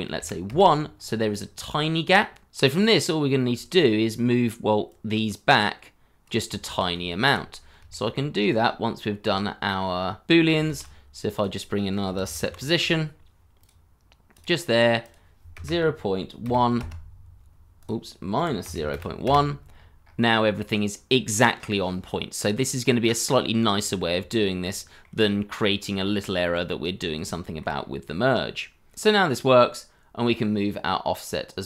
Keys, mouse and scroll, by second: 0.1 1, 0.4 Return, 2.6-3.3 scroll up 1, 3.7-6.4 scroll up 1, 6.7 ctrl+z, 7.5 scroll down 1, 7.8 shift+middle click, 8.7 scroll down 1, 9.0 shift+middle click, 10.0 scroll up 1, 10.7 shift+a, 12.0 s, 12.2 e, 12.4 t, 15.5 KP_0, 15.6 KP_Decimal, 16.4 KP_1, 16.7 KP_Enter, 18.3 KP_Subtract, 18.6 KP_0, 18.7 ., 18.9 1, 19.2 Return, 19.7-22.1 scroll up 1, 22.3-22.8 scroll down 1, 24.2 scroll, 24.3 shift+middle click, 25.2 shift+middle click, 25.2-25.9 scroll up 1, 26.0 shift+middle click, 26.6-27.2 scroll down 1, 27.3 shift+middle click, 27.7 scroll up 1.